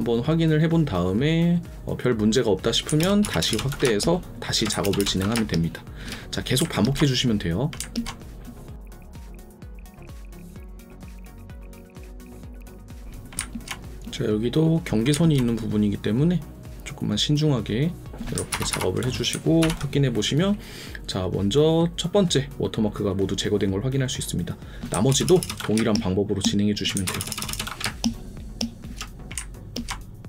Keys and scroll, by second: 3.0 ctrl+KP_Add, 3.8 space, 4.8 ctrl+KP_Add, 5.3 space, 9.1 ctrl+z, 9.3 ctrl+z, 10.5 ctrl+z, 12.6 alt+space, 18.5 ctrl+KP_Subtract, 19.6 ctrl+0, 24.9 KP_Subtract, 25.1 ctrl+KP_Add, 25.7 space, 27.0 ctrl+KP_Add, 27.8 space.